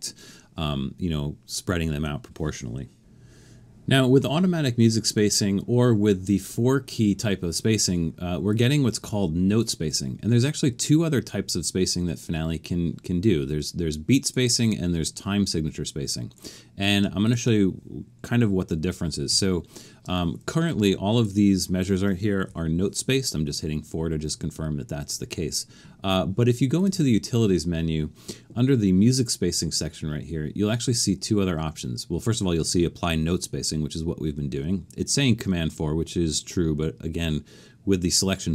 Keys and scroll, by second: 19.3 4, 22.5 4.